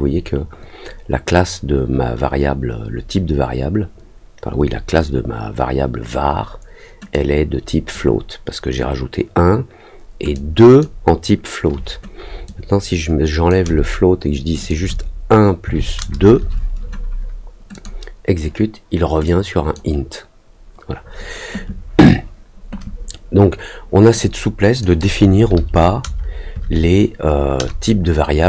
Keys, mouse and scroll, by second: 7.1 click, 10.3 click, 12.4-13.4 drag, 14.5 click, 17.7 click, 19.2 click, 24.1 click.